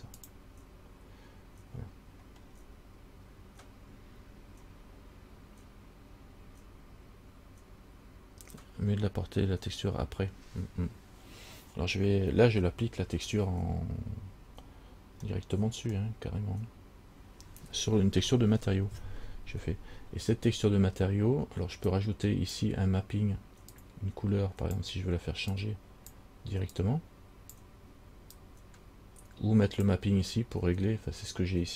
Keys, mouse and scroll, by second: 2.6 scroll down 3, 15.6 middle click, 22.1 click, 23.9 click, 25.7 click, 27.0 click, 28.6 click.